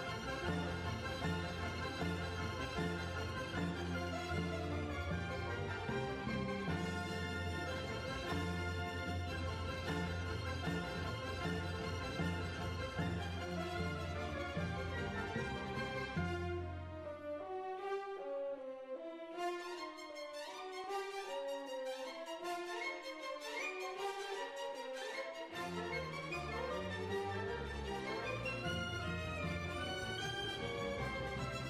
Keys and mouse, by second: 2.8 right click, 3.4-4.6 drag, 4.6 middle click, 5.1-6.3 drag, 5.1-6.2 right drag, 6.3-8.0 right drag, 6.6-8.3 drag, 8.0-9.3 middle drag, 9.3 click, 10.2-12.1 middle drag, 12.1 Tab, 14.3 KP_3, 15.1 Tab, 15.6 middle click, 16.0-18.3 right drag, 16.2-18.3 drag, 20.8 middle click, 22.5 right click, 23.6 click, 24.1 middle click, 24.5 right click, 25.1-31.0 typing, 25.9 right click, 30.0 click, 31.4 middle click.